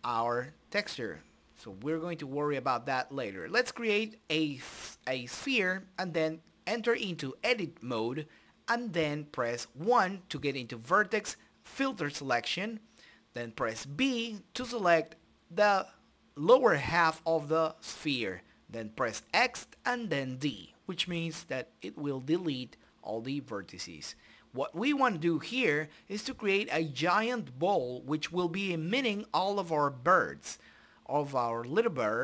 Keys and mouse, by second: 0.0 Delete, 0.2 shift+a, 1.2 click, 2.0 s, 3.0 middle click, 3.7 right click, 3.7 Tab, 4.5 KP_1, 5.9 middle click, 7.9-9.8 drag, 9.8 a, 10.4 z, 13.2-15.9 middle drag, 16.7 z, 17.5 b, 18.9 Delete, 20.0 Tab, 20.7 middle click, 21.0 right click, 22.0 s, 22.7 middle click, 23.2 ctrl+space, 24.3 click, 26.1 middle click, 26.2 right click, 26.8 g, 27.4 right click, 28.0 s, 28.5 middle click, 29.6 click, 30.2 t, 31.5 click, 32.1 t.